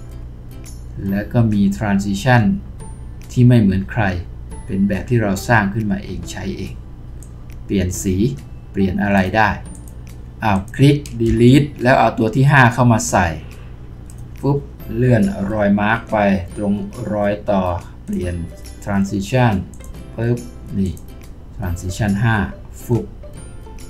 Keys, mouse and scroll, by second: 11.2 Delete.